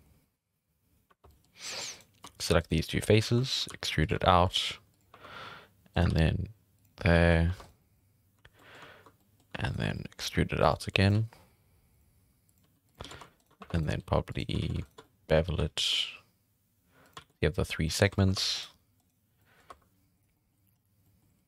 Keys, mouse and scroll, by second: 0.1 3, 1.1 3, 1.3 middle click, 1.9 right click, 2.6 shift+right click, 3.4 shift+middle drag, 3.7-6.1 typing, 5.9 right click, 7.0-7.3 scroll down 3, 7.3 scroll up 5, 7.4 3, 7.6 right click, 7.8-9.6 middle drag, 9.6 shift+right click, 10.2 e, 10.8 r, 11.1 g, 12.2 r, 12.6 g, 13.0 alt+a, 13.4 alt+shift+right click, 13.6 1, 13.8 right click, 13.9 g, 14.6 alt+a, 14.8 alt+shift+right drag, 15.0 middle click, 15.4-15.7 scroll up 1, 15.7 ctrl+b, 17.2 alt+a, 17.3 scroll down 2, 17.3 middle click, 18.0 scroll up 3, 18.1 shift+middle click, 18.4 2, 18.6 right click, 19.0 right click, 19.3 scroll down 1, 19.4 middle click, 19.7 2, 20.2 right click, 20.3 middle click, 20.7 scroll up 1, 21.0 middle click.